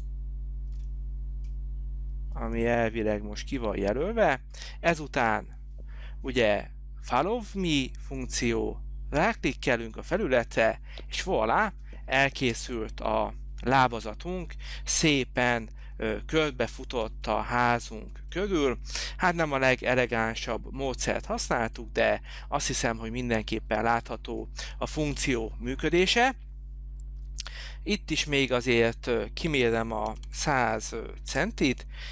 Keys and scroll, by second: 12.7 space, 30.0-31.0 typing, 31.5 Return.